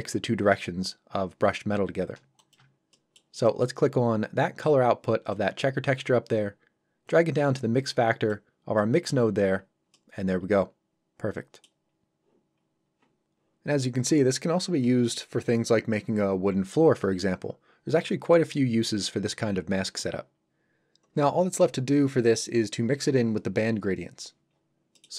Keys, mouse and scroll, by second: 2.4 click, 2.9 shift+scroll up 1, 2.9 middle click, 5.3 click, 8.8 middle click, 9.6 scroll up 1, 9.9 middle click, 11.9 scroll down 1, 12.6 scroll up 1, 24.5 scroll down 1, 24.9 middle click.